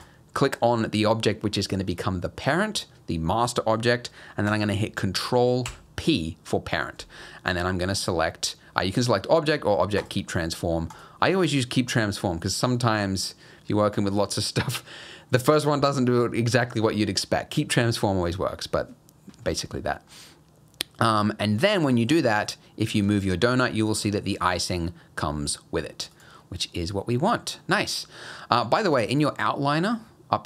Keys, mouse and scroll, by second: 5.7 ctrl+p, 10.9 click, 20.1 middle click, 21.9 middle click, 22.3 click, 23.0 g, 27.6 middle click.